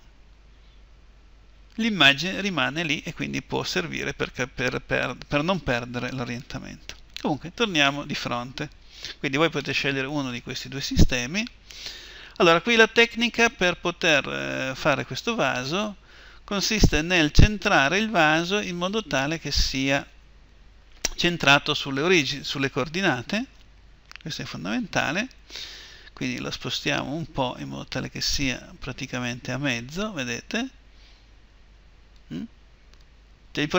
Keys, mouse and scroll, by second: 7.2 KP_1, 26.1-28.3 drag, 31.9-33.7 drag.